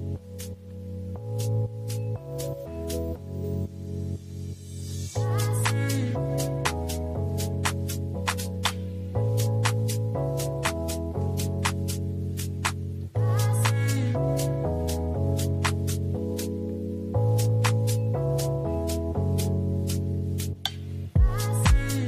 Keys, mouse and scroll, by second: 0.0 middle drag, 0.6-1.8 drag, 3.0-3.4 middle drag, 3.6 drag, 4.4-5.0 middle drag, 7.4-8.2 middle drag, 8.5 middle click, 9.5 middle click, 11.2 shift+a, 15.6 click, 20.4 shift+a.